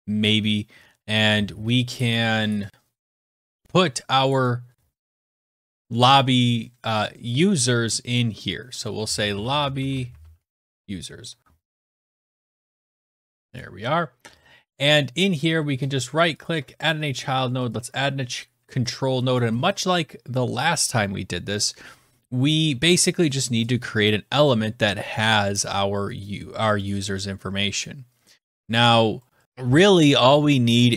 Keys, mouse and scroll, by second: 4.2 click, 4.4 click, 8.7-11.0 typing, 11.8 click, 12.2 BackSpace, 12.4 u, 13.0 click, 14.8 click, 14.8 right click, 16.3 click, 17.6 click, 18.2 click, 26.7 click, 26.9 click, 28.5-29.4 scroll.